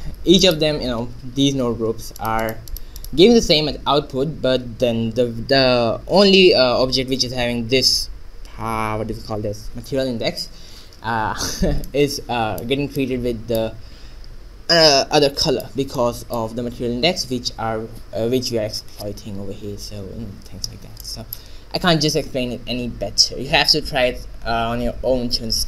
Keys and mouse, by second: 0.5 Tab, 2.8-9.2 drag, 11.3 Tab, 12.6 middle click, 16.4 middle click, 16.8 middle click, 21.1-25.2 middle drag.